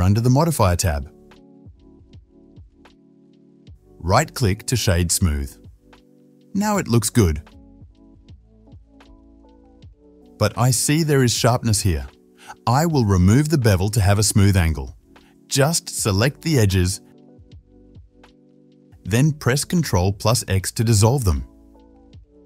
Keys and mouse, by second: 0.0-5.1 drag, 5.1-14.1 middle drag, 7.3 drag, 7.3 right drag, 7.7 click, 7.7 right click, 10.0-10.4 drag, 10.0-10.4 right drag, 11.4 click, 11.4 right click, 14.1-16.0 right drag, 16.0 Tab, 16.9 click, 17.4 middle click, 17.6 alt+shift+click, 17.9 alt+shift+middle click, 18.7-22.4 ctrl+shift+drag, 19.3 ctrl+x, 19.8 Tab.